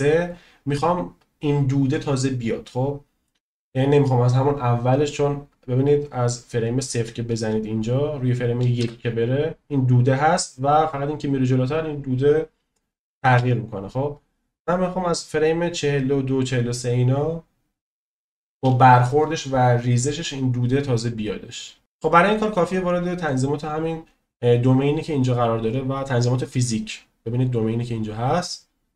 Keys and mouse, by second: 5.9-7.1 drag, 8.8 space, 13.3 space, 14.0-16.7 drag, 23.1 click.